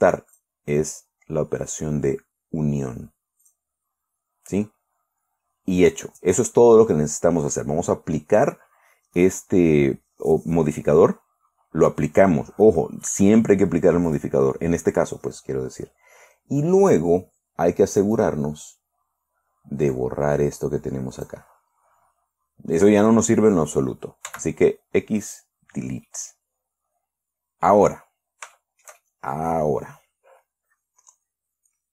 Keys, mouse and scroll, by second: 0.8 click, 3.9 click, 14.5 click, 18.5 right click, 20.4-21.9 drag, 24.7 x, 25.7 click, 26.5 middle click, 26.6 scroll down 2, 28.4 scroll up 1, 29.0 shift+click, 29.1-30.0 shift+middle drag.